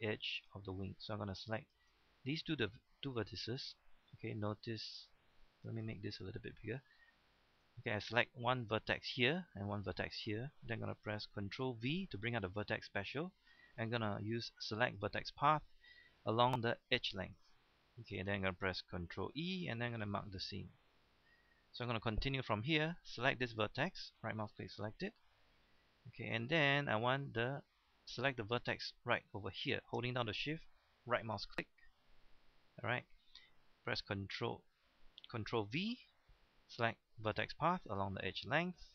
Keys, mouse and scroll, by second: 1.6 shift+right click, 2.3 middle click, 4.9-6.0 drag, 6.4 shift+middle click, 7.1 scroll down 1, 7.3-9.0 shift+middle drag, 11.7 ctrl+v, 14.8 click, 17.5 middle click, 19.3 ctrl+e, 19.9 click, 20.4 middle click, 21.9-23.0 scroll up 1, 23.0 right click, 23.9-24.2 scroll down 1, 24.2 middle click, 25.9 shift+middle click, 26.5-27.2 scroll up 1, 31.0 shift+right click, 31.7-32.2 scroll down 1, 32.2 middle click, 32.9-33.4 scroll up 1, 35.8 ctrl+v, 36.8 click.